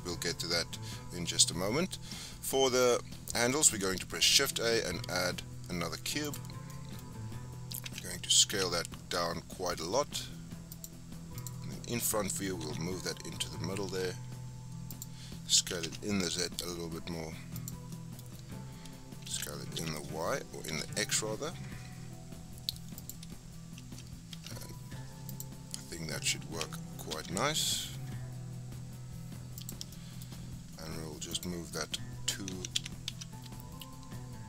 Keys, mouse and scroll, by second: 0.5-1.3 scroll up 9, 1.3-2.8 scroll down 1, 2.9-3.5 scroll down 5, 3.5 middle click, 4.3 shift+a, 6.5 scroll down 5, 6.7-7.8 middle drag, 7.8 s, 8.5 s, 11.4 click, 11.9-12.6 scroll up 4, 12.6 g, 15.6 s, 17.9-19.3 middle drag, 19.3 s, 23.9 s, 26.4 s, 29.9-31.3 shift+middle drag, 31.3 click, 32.5 g.